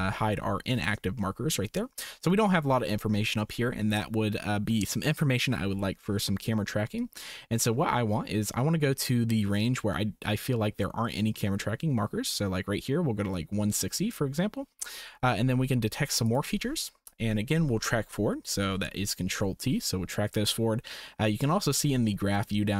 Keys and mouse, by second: 1.1 shift+click, 7.0-14.2 drag, 17.2 click, 18.6 ctrl+t.